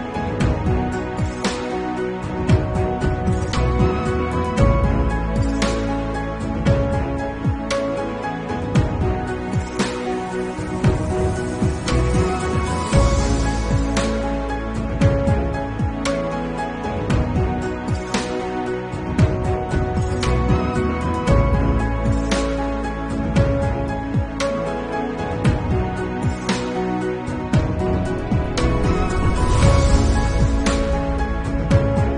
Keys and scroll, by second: 0.5 ctrl+s, 2.8 [, 3.8 ], 5.3 [, 6.0 ], 6.7 ctrl+alt+z, 9.1 ctrl+s, 9.2 [, 11.8 ctrl+s, 12.0 [, 18.4 ctrl+alt+z, 18.7 ctrl+s, 18.8 ctrl+alt+z, 18.9 ctrl+s, 20.1 ctrl+s, 25.0 ctrl+s, 25.3 ], 30.4 ctrl+s.